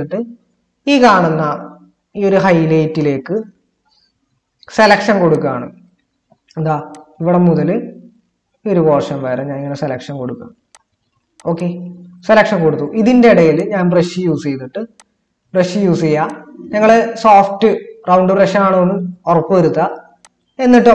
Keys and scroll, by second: 3.3 ctrl++.